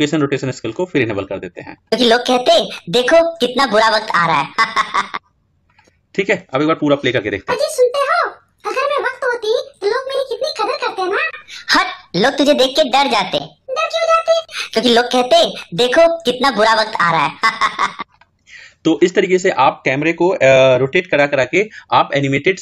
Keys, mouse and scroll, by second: 1.5 click, 5.7 click, 17.8-22.6 drag.